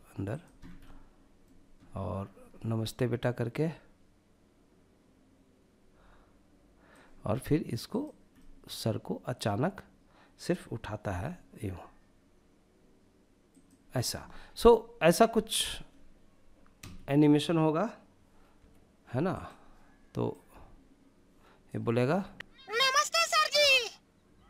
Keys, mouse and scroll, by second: 2.3-6.1 drag, 7.0 click, 7.5-8.6 middle drag, 10.2 r, 12.7 click, 17.7 i, 19.5-20.8 drag, 21.2 space.